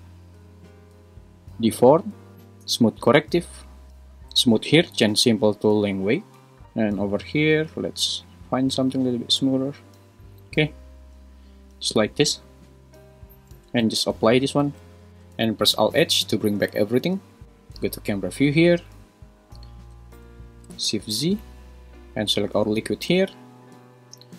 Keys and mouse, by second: 6.6-9.6 drag, 14.5 super+a, 15.1 `, 16.7 alt+h, 17.4 `, 17.8 `, 20.8 shift+z, 23.1 `.